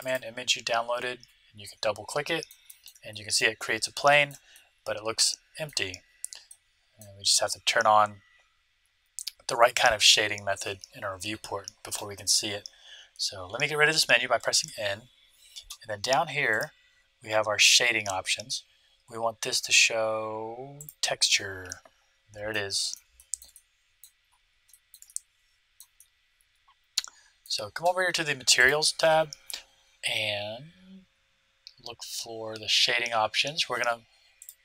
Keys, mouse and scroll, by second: 0.0-1.9 drag, 2.0-9.2 middle drag, 9.5-11.5 middle drag, 14.6 n, 16.4-18.2 drag, 21.6-27.7 middle drag, 28.5-30.3 drag, 31.6-34.2 middle drag, 34.4-34.6 drag.